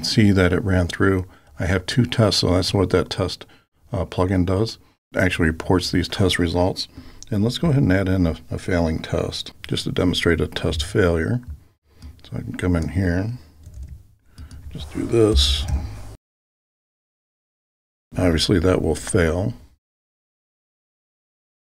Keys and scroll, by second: 13.8 super+c, 15.7 super+v.